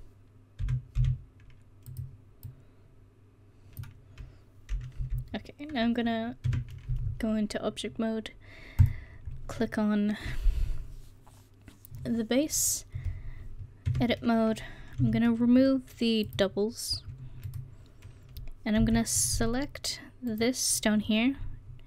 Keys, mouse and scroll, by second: 0.6 s, 5.0 KP_1, 6.5 Tab, 8.2-8.5 drag, 8.9-10.0 drag, 13.9 Tab, 15.0 w, 18.8 c, 20.3-21.8 drag.